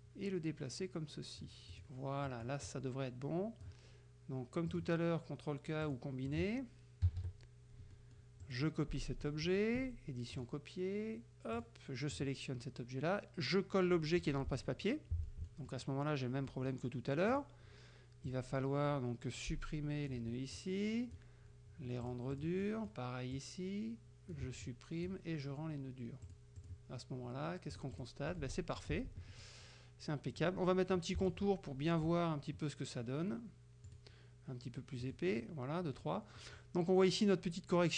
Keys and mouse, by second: 1.8 click, 2.3-3.8 drag, 4.8 click, 5.9 click, 6.3 click, 7.1 KP_Subtract, 8.0 middle click, 8.5 click, 10.4 click, 11.6 click, 12.2 click, 14.6 click, 15.3 middle click, 16.5 middle click, 17.4 click, 18.4-20.3 drag, 20.3 Delete, 20.6 click, 22.1-22.7 drag, 22.7 click, 23.4-24.6 drag, 24.5 Delete, 24.7 click, 26.3 click, 26.7 click, 27.8 click, 28.3 middle click, 28.8 click, 31.3 shift+click, 33.9 right click, 35.1 click, 36.0 middle click, 36.5 middle click.